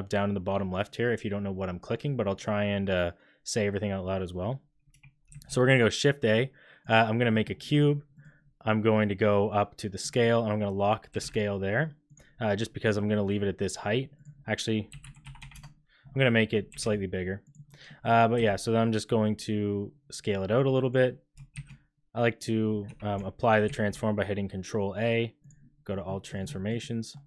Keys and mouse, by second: 5.2 shift+a, 7.2 click, 10.0 click, 11.1 g, 14.2-16.0 drag, 16.6 g, 17.8 middle click, 18.3 s, 21.5 shift+a, 22.8 Escape, 23.6 ctrl+a, 25.9 drag, 26.8 click.